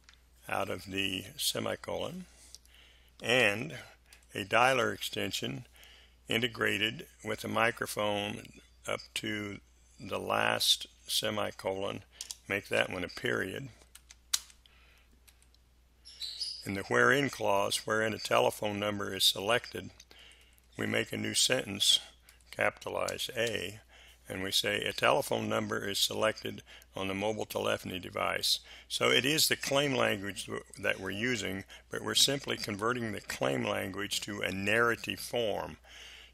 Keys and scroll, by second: 3.3 space, 4.1 Delete, 12.2 BackSpace, 12.7 ., 13.9 space, 15.2 Delete, 20.2 Delete, 23.3 shift+a.